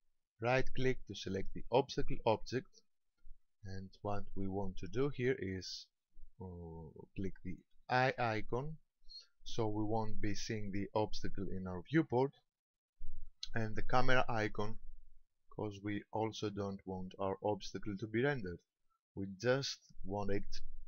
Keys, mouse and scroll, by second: 0.4 right click, 8.0 click, 14.4 click.